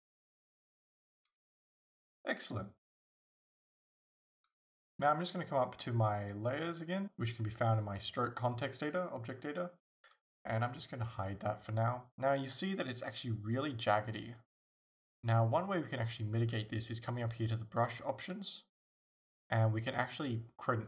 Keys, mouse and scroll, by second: 6.2 click, 6.8 click, 10.1 click, 11.1 click, 18.4-20.8 drag.